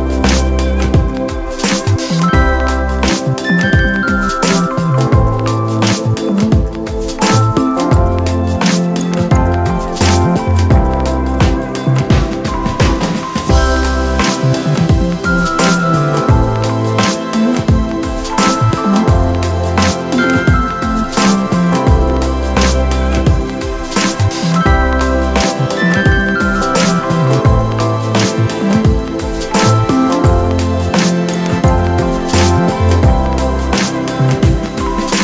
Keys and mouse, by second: 7.1 click, 8.9 click, 12.7 click, 14.1 click, 15.9 click, 18.0 click, 19.0 click, 20.4 [, 20.6 [, 20.7 [, 20.8 [, 21.5 click, 22.9 click, 26.9 click, 27.6 click, 30.3 click, 30.4 ctrl+0, 34.0 click.